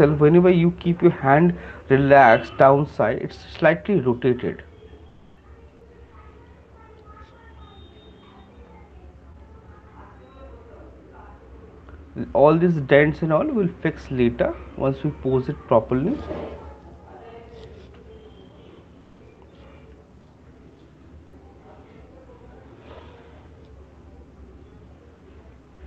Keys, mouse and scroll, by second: 0.0 click, 5.6 click, 6.0 shift+click, 7.3 alt+click, 12.0 click, 25.6 click.